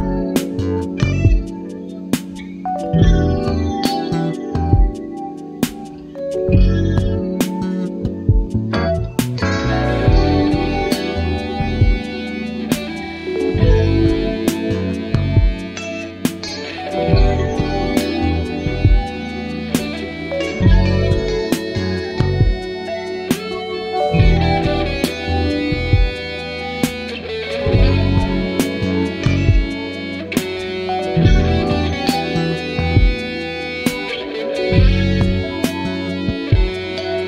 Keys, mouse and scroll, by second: 1.1 click, 1.9 click, 3.1-4.9 drag, 6.1 click, 7.6-9.1 ctrl+drag, 9.1 ctrl+z, 11.8 ctrl+z, 13.5 click, 15.1 shift+click, 17.1 click, 18.2 ctrl+click, 21.7-23.5 drag, 23.9-26.0 ctrl+drag, 27.6 click, 29.4-31.3 ctrl+drag, 31.8 shift+click, 32.8 ctrl+KP_Add, 34.8 ctrl+z, 35.9 ctrl+z, 36.9 ctrl+click.